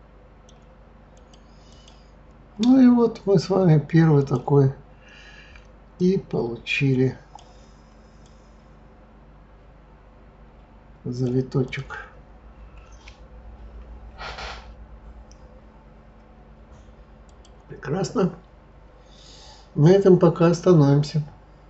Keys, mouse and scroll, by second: 1.1 click, 1.7 click, 2.2-4.2 scroll down 7, 4.2 click, 6.0 click, 8.2 click, 11.6 click, 17.2 click, 18.8-19.4 scroll up 6, 20.2-21.6 scroll up 1.